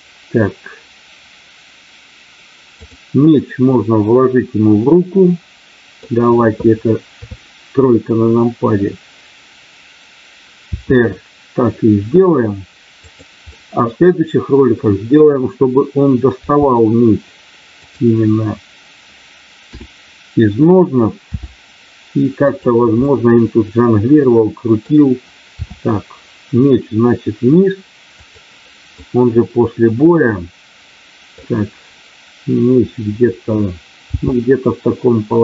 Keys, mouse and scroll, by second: 4.7-6.0 middle drag, 7.1 KP_3, 10.7 r, 13.0 click, 13.6-14.8 middle drag, 16.3 g, 17.7 click, 19.6 KP_7, 21.2 r, 22.3 click, 22.9-24.9 middle drag, 25.4 r, 28.1 click, 28.9-31.3 middle drag, 34.2 g.